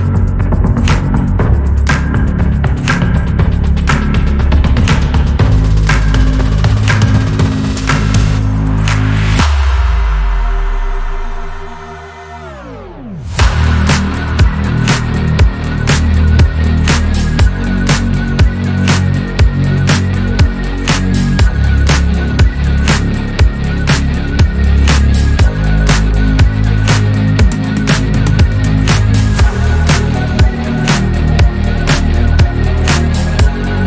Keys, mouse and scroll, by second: 0.1 r, 1.2 g, 3.1 r, 4.6 click, 4.8-5.3 scroll down 2, 5.3 scroll up 3, 5.6-6.1 shift+middle drag, 6.1 click, 7.0 shift+d, 7.9 r, 8.9 g, 12.1 r, 14.4 g, 15.6 click, 15.8 scroll down 3, 16.6 scroll up 3, 17.6-18.2 shift+middle drag, 18.2 drag, 18.9 g, 21.2 r, 22.3 click, 22.9 click, 23.4 g, 24.4-26.8 middle drag, 26.8 KP_3, 27.5-28.6 scroll down 1, 28.6-29.5 shift+middle drag, 29.5 scroll up 3, 30.1 scroll down 2, 30.7 scroll up 3, 31.0-31.4 shift+middle drag, 31.4 drag, 32.7 click, 33.5 shift+s.